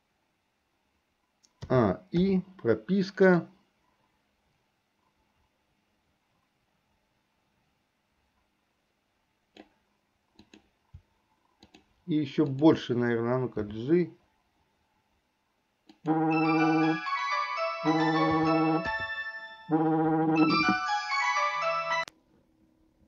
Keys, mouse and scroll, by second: 1.7 a, 2.3 i, 3.5-9.8 drag, 10.5 click, 12.6 shift+click, 13.6 g, 18.4 a, 19.0 i.